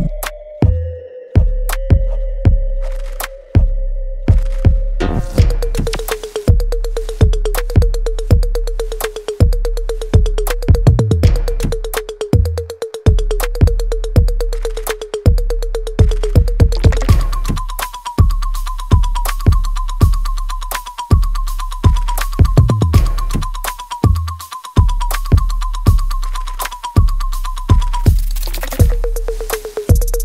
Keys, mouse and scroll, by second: 0.1 click, 3.1-5.5 alt+drag, 6.5 w, 8.6-16.4 ctrl+shift+drag, 18.3 right click, 19.5 click, 20.5 space, 21.6 alt+middle click, 22.0 click, 22.3 alt+right click, 24.4 click, 25.7 w, 26.4-28.3 drag, 28.3 space, 29.1 alt+right click.